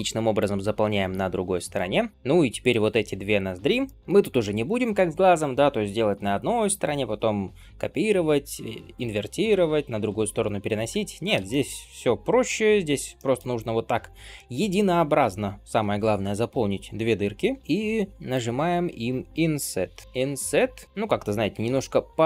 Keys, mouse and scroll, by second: 0.2 shift+click, 0.7 f, 1.6 click, 2.1 ctrl+KP_Add, 3.7-5.9 shift+middle drag, 11.4 shift+middle click, 13.0-14.7 middle drag, 17.6-18.1 scroll down 2, 18.1 middle click, 18.4-19.3 scroll up 1, 19.9 i.